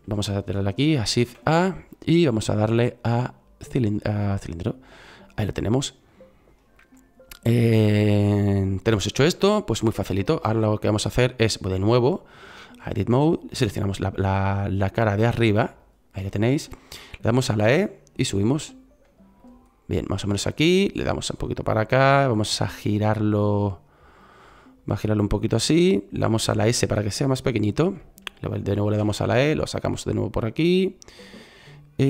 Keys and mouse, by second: 1.1 shift+a, 6.8-11.6 middle drag, 17.6 e, 20.9-22.0 drag, 25.9 click, 26.6 s, 28.9 e.